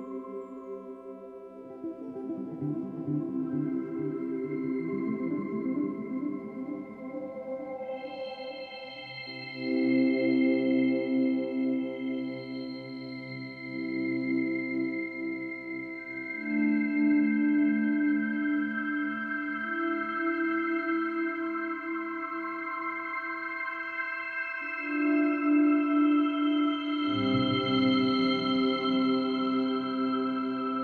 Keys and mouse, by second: 0.0 click, 0.8 Escape, 1.6 click, 2.6 -, 2.7 -, 2.8 -, 3.9-4.9 drag, 4.9 ctrl+d, 5.8-8.2 drag, 8.4 Delete, 8.9-10.3 drag, 10.3 ctrl+g, 11.5 ctrl+d, 12.7-13.8 drag, 13.8 shift+Right, 14.3 shift+Right, 15.5 shift+Right, 16.1 Right, 18.9 click, 21.1 click, 25.0 click, 26.0 click, 28.5 ctrl+click, 28.8 ctrl+click, 30.2-30.8 drag.